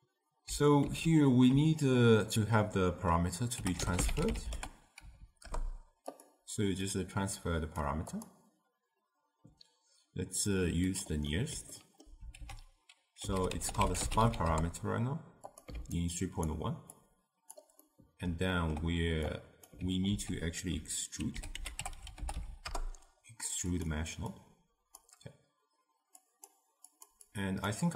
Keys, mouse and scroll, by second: 0.9 ctrl+a, 6.9 drag, 8.1-11.2 drag, 11.3-12.4 middle drag, 12.4 ctrl+a, 15.9-17.0 alt+right drag, 17.0 click, 17.8 scroll up 1, 17.8 scroll down 1, 17.9-19.4 middle drag, 19.4 click, 20.1 ctrl+a, 24.4-26.3 drag, 26.9 click, 27.3-27.9 drag.